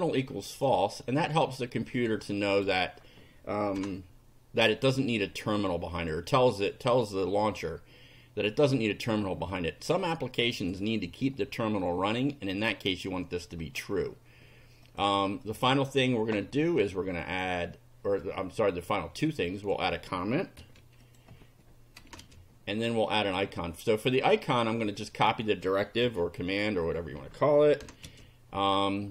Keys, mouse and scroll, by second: 0.0 click, 1.0 right click, 2.0 click, 2.5 click, 3.8 Return, 4.9 right click, 6.0 click, 10.6 click, 14.8 click, 15.4 click, 18.2-19.8 drag, 20.6 ctrl+c, 21.1 ctrl+click, 22.0 Return, 22.2 ctrl+v, 23.3 click, 24.7 click, 26.0 ctrl+c, 26.5 ctrl+click, 27.8 Return, 28.0 ctrl+v.